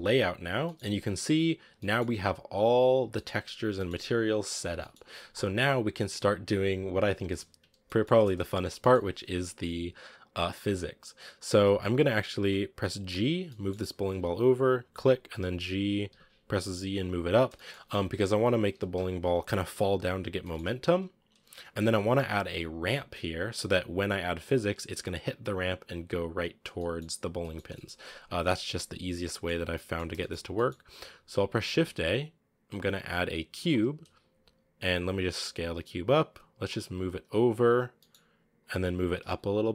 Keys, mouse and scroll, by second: 0.4-0.9 scroll down 5, 0.5 middle drag, 1.1-1.6 scroll up 7, 1.6-2.8 middle drag, 2.8 scroll down 2, 3.0-4.0 middle drag, 4.0 scroll up 1, 4.6-8.5 middle drag, 8.5 scroll down 1, 8.7-9.7 middle drag, 9.7-11.1 scroll up 1, 11.8-12.9 scroll down 1, 12.9 g, 15.2 g, 17.4-18.6 shift+middle drag, 18.6 g, 20.2 scroll down 1, 20.2 middle click, 20.5 g, 26.5 scroll up 1, 26.6-27.2 middle drag, 27.2 scroll down 1, 27.2-29.5 middle drag, 29.5 scroll up 1, 29.6-30.2 middle drag, 30.2 scroll up 2, 30.4 middle click, 30.5-31.0 scroll down 3, 31.0-31.3 scroll up 2, 33.5 shift+a, 33.7-34.8 scroll down 3, 34.8 s, 37.0 g, 38.8 g.